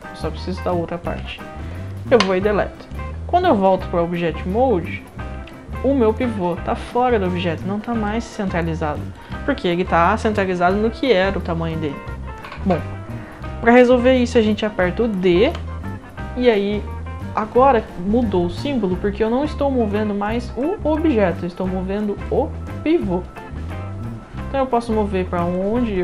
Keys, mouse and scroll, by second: 2.9-3.6 right drag, 5.2 middle click, 5.5-6.8 alt+drag, 7.7 scroll up 1, 8.0-9.1 alt+drag, 15.4 d, 22.2-22.9 drag.